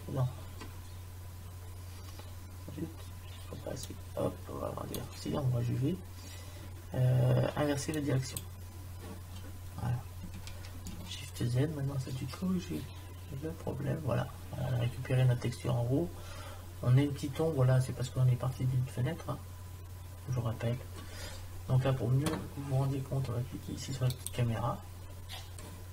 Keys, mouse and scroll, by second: 3.8 click, 11.1 shift+z, 24.7-25.9 drag.